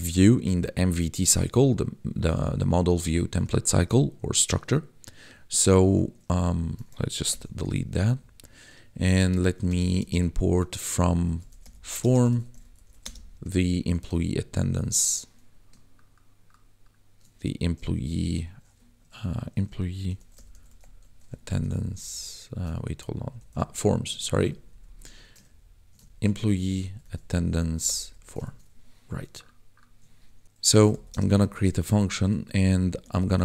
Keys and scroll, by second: 6.4 Up, 7.3 ctrl+shift+k, 7.8 ctrl+s, 8.0 Up, 9.5-10.2 typing, 11.2-14.0 typing, 17.9 p, 20.0 o, 20.3 y, 21.0 shift+a, 21.8 ctrl+Left, 23.2 Left, 23.6 Right, 23.8 s, 24.5 ctrl+Right, 26.7 t, 27.8 Down, 27.9 Tab, 28.4 ctrl+s, 30.4 Return, 30.6 d, 30.7 e, 31.1 space, 32.5-33.4 typing.